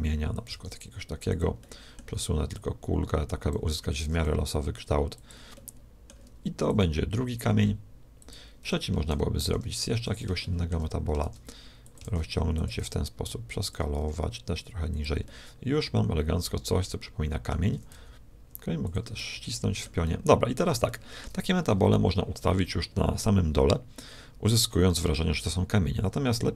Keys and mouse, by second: 0.5 shift+d, 1.5 middle click, 2.5-4.1 drag, 3.9 shift+d, 5.5-6.6 middle drag, 6.6-8.4 drag, 7.4 g, 9.4 shift+d, 10.4-12.2 middle drag, 11.3 shift+d, 12.0 shift+d, 12.8 s, 14.0 g, 15.3-17.2 middle drag, 17.7 s, 19.1-21.2 middle drag.